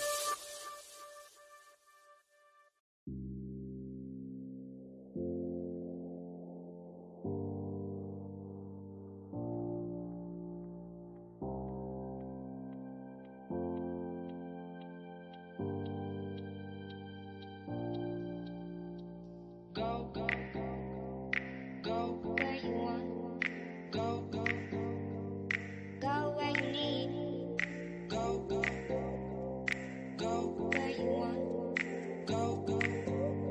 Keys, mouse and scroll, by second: 1.7 click, 2.2 scroll down 1, 2.9-5.6 middle drag, 5.9 click, 8.5 click, 10.8 click, 13.4 click, 16.4 click, 17.0 scroll down 1, 17.0-19.0 middle drag, 19.0 click, 20.4-20.8 scroll up 1, 21.9 middle click, 23.1 scroll down 1, 25.9 middle click, 26.5 scroll down 1, 29.2 click, 29.7 scroll down 1, 30.5-33.5 middle drag.